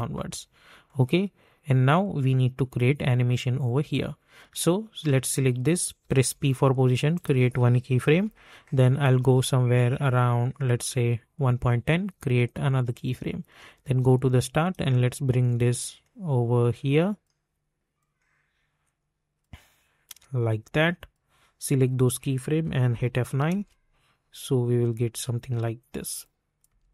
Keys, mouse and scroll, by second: 6.2 p, 7.1 click, 8.0 typing, 10.1-18.0 drag, 18.0-21.7 drag, 22.9 F9, 23.5 space, 26.2 click, 26.6 space.